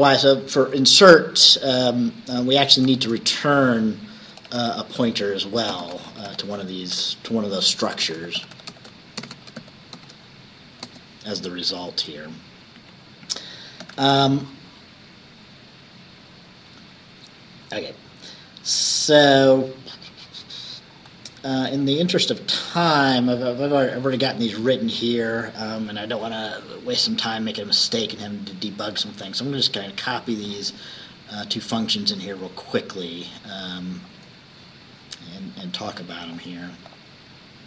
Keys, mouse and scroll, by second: 2.8-10.9 typing, 11.7 Left, 12.9 Down, 13.9 ctrl+s, 15.2-16.4 scroll down 1, 16.4-18.7 scroll down 1, 21.0-21.7 scroll down 2, 22.7-23.8 scroll down 1, 23.8 click, 29.1 click, 30.2 scroll down 1, 30.6-32.0 scroll up 2, 32.2-32.6 scroll up 1, 32.9 scroll up 1, 33.8-34.5 scroll up 2, 35.7 click, 37.0 click.